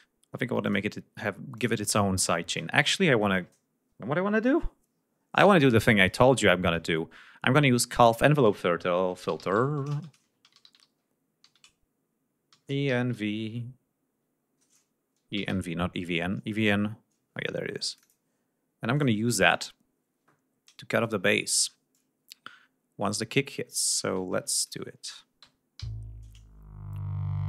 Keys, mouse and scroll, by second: 0.7 click, 1.6 click, 2.3 right click, 8.0 click, 8.9-16.0 typing, 11.7 ctrl+shift+a, 17.9 click, 19.0 click, 21.1 click, 24.3 ctrl+scroll down 2, 24.6 ctrl+click, 25.8 l.